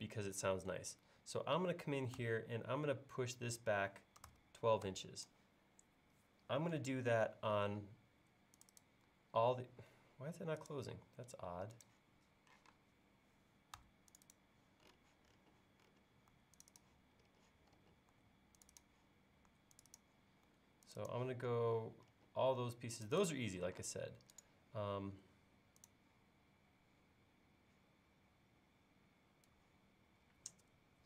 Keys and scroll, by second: 4.0-5.3 typing, 9.9 l, 12.6 p, 23.9 space.